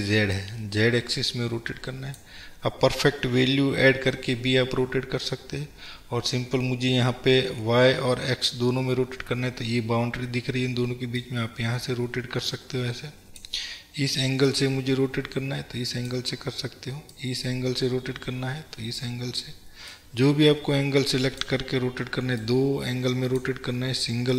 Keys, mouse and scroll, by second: 4.0 scroll down 1, 6.0-9.5 scroll up 1.